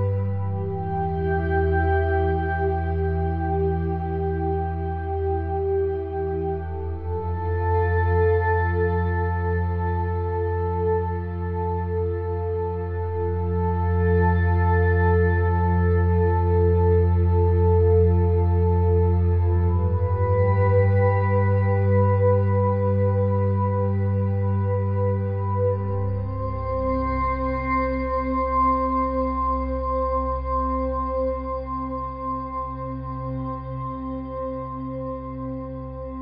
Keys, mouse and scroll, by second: 0.9 a, 1.0 a, 1.2 s, 2.1 Tab, 2.4 Tab, 2.7 e, 3.8 Tab, 4.3 click, 4.6 Tab, 5.0 middle click, 5.2 ctrl+r, 6.3 Tab, 7.5 ctrl+alt+click, 8.9 middle click, 9.7 shift+d, 10.0 click, 11.4-12.6 middle drag, 12.3 shift+a, 13.9 click, 16.4 s, 17.2 click, 17.8 s, 18.4 click, 21.6 middle click, 22.3 click, 23.0 click, 23.7-25.2 drag, 25.8 s, 26.1 click, 26.4 KP_1, 28.2 s, 29.3 Tab, 29.9 click, 30.6 ctrl+KP_Add, 31.9 e, 33.7 middle click, 34.3 Tab, 34.8 shift+d, 35.1 middle click, 35.5 click.